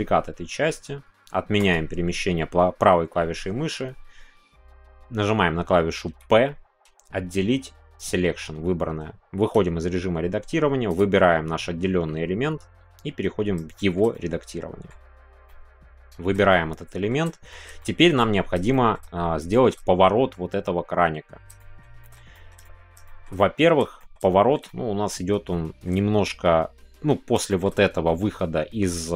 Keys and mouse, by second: 1.6-2.6 right drag, 9.4 Tab, 10.9 click, 13.1 Tab, 13.7 shift+middle click, 14.1 middle click, 15.4 middle click, 15.4 a, 16.5 middle click, 17.2 middle click, 17.8 shift+click, 18.7 shift+middle click, 19.5 shift+middle click, 21.5 shift+middle click, 22.0 shift+middle click, 22.3 middle click, 23.0 shift+middle click, 23.3 middle click, 24.0 shift+middle click, 24.3 shift+middle click, 24.6 middle click, 25.5 shift+middle click, 27.4-29.1 shift+middle drag.